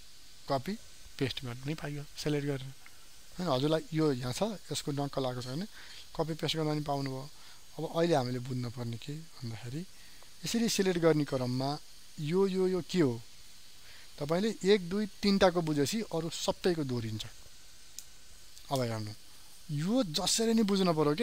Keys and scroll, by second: 8.3 ctrl+alt+z.